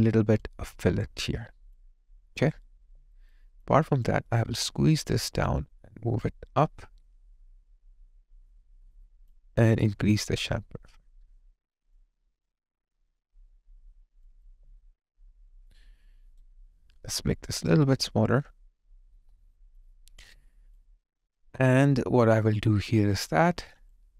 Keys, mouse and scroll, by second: 3.0 alt+right click, 3.4 alt+click, 16.1 alt+right click, 20.8 alt+click, 23.6 alt+middle click, 24.0 alt+click.